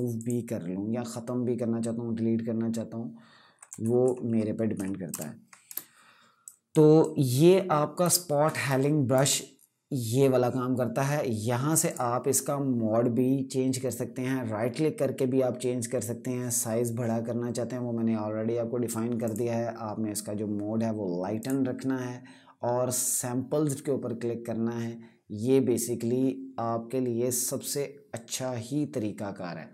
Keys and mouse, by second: 3.4 ctrl+Num_Lock, 3.5 KP_Subtract, 4.8 ctrl+KP_Add, 5.5 space, 6.1 click, 6.2 space, 6.7 click, 6.8 space, 8.4 click, 8.5 space, 11.6 click, 18.9 click, 19.1 typing.